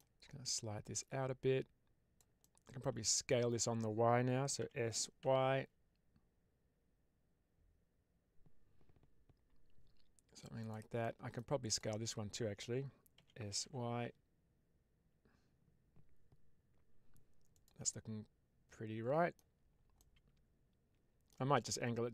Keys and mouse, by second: 0.9-2.0 drag, 2.3 middle click, 3.1 shift+middle click, 4.5 s, 5.1 y, 10.5 click, 10.9 middle click, 11.6-12.7 drag, 13.0 s, 13.5 y, 17.4 click, 17.8-19.2 middle drag, 19.9-21.2 middle drag.